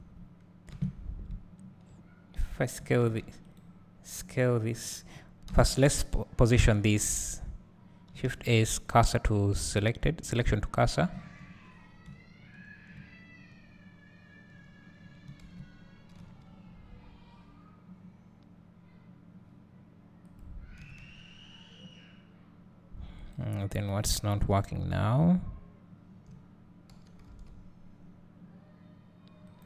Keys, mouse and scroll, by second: 0.7 KP_Divide, 1.3 `, 2.9 s, 3.6 right click, 5.5 KP_Divide, 6.4 scroll up 1, 6.9 `, 11.3 click, 11.6-12.1 scroll down 1, 15.0 scroll up 1, 20.9 s, 27.0 g.